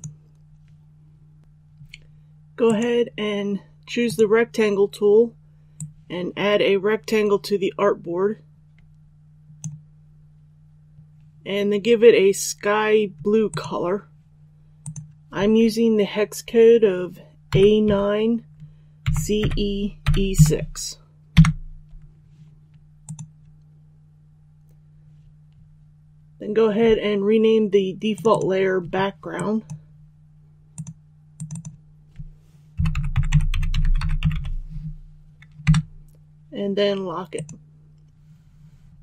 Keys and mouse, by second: 17.4 a, 17.8 KP_9, 19.0-20.3 typing, 23.0-31.4 drag, 32.7-34.3 typing, 37.3-38.4 drag.